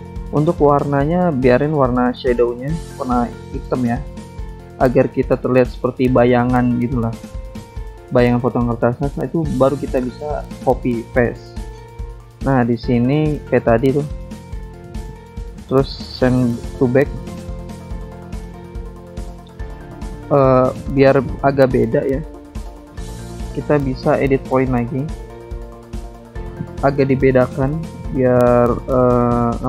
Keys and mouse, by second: 0.3 click, 1.2 click, 3.1 alt+Tab, 5.6 click, 7.3 ctrl+c, 8.7 shift+click, 9.8 click, 11.5 click, 12.2 click, 14.0 click, 14.8 click, 15.6 click, 16.9 click, 17.5 ctrl+click, 18.4 ctrl+click, 19.3 click, 19.8 click, 21.5 ctrl+click, 23.6 click, 24.2 click, 25.2 click, 26.7 click, 27.9 click, 29.2 click.